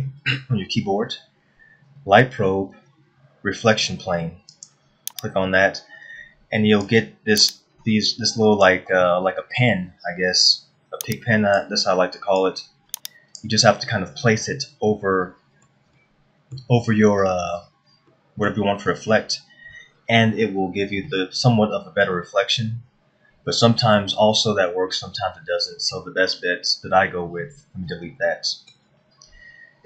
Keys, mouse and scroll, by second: 0.2 shift+a, 6.2-7.3 scroll down 2, 7.5 click, 9.6 middle click, 11.0 click, 13.0 click, 14.3-14.8 scroll up 2, 15.6 middle click, 16.8 middle click, 19.2 middle click, 21.7 middle click, 29.3 Delete.